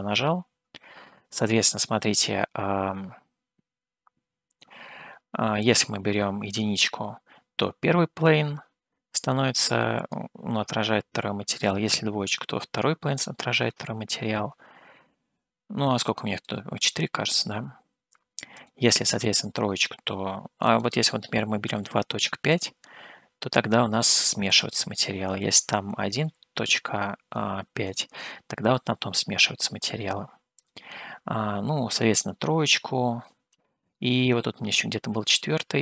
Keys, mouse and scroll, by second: 5.7-6.9 drag, 10.1-11.8 drag, 13.9-16.6 middle drag, 18.7 click, 21.0-23.2 drag, 24.7-28.1 drag, 30.7-32.5 drag, 34.1-35.1 middle drag.